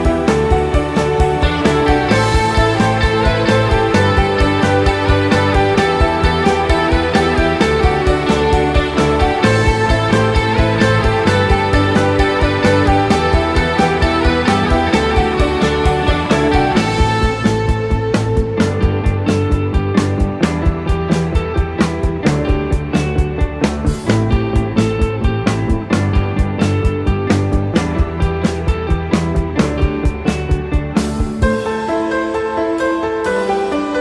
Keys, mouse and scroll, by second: 0.4 ctrl+b, 3.1 click, 3.4 middle click, 5.0 ctrl+r, 6.8 ctrl+b, 8.9-9.3 scroll up 1, 9.3-9.8 scroll down 1, 9.8 scroll down 1, 9.8 KP_1, 10.7 s, 11.7 scroll up 1, 12.8 click, 13.4-13.9 scroll up 1, 13.9 click, 14.8 click, 15.4 middle click, 16.5 ctrl+click, 16.9 middle click, 17.6 ctrl+click, 18.0 middle click, 18.9 ctrl+click, 19.3 middle click, 20.0 ctrl+click, 20.7 KP_1, 21.8 s, 23.6-24.3 scroll down 1, 24.3 Tab, 24.3 scroll down 1, 24.5 middle click, 26.5 click, 27.0 click, 30.4 click, 31.3 right click, 33.4 KP_1.